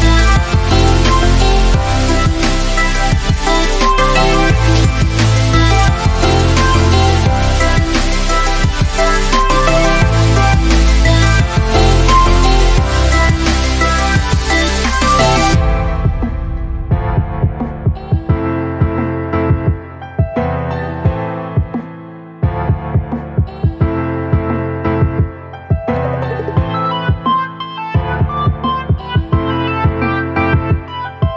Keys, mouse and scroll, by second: 0.2 click, 1.2 scroll down 1, 2.0 click, 8.0-9.0 alt+shift+drag, 8.6 alt+click, 10.2-10.5 alt+click, 11.3-11.6 alt+click, 12.9 click, 14.2-15.2 alt+drag, 17.8 alt+space, 17.9 alt+click, 18.3 alt+space, 19.8 click, 20.1-20.4 drag, 23.7 ctrl+s, 25.5 click, 29.9 click.